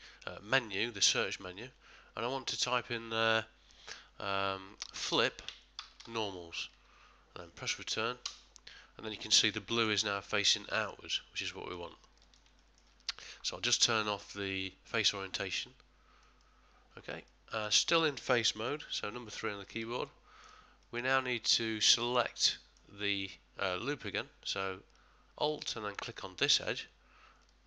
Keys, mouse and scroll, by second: 9.5 middle click, 10.2 click, 11.4 middle click, 12.2 middle click, 12.2 ctrl+middle click, 12.6 shift+middle click, 14.0 click, 17.3 middle click, 18.8 3, 19.3 middle click, 19.7 ctrl+middle click, 20.8 middle click, 26.5 alt+click.